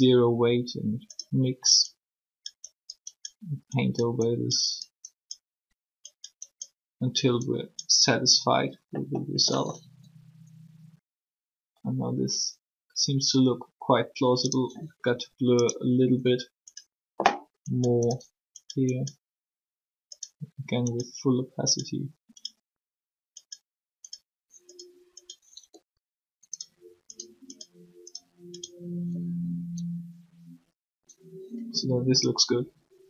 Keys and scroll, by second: 9.8 r, 15.1 r, 25.6 r, 29.2 r.